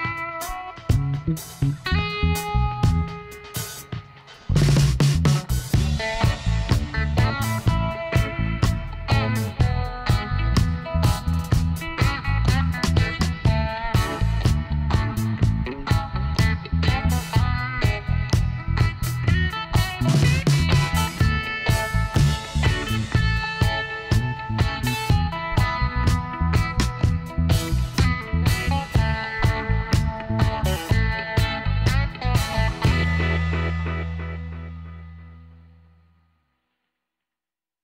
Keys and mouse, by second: 0.9-2.5 drag, 2.6 click, 3.9 ctrl+r, 8.5-10.3 drag, 10.0-11.9 right drag, 10.8 b, 13.9-15.7 drag, 17.3-19.1 right drag, 18.0 b, 19.9-21.7 drag, 22.4-24.1 right drag, 23.1 b, 24.4-26.0 drag, 26.0-29.3 middle drag, 28.2-29.9 right drag, 29.3 b, 30.6-32.2 drag, 33.4-34.6 middle drag, 33.9 Tab, 35.1 Tab, 36.8 ctrl+r.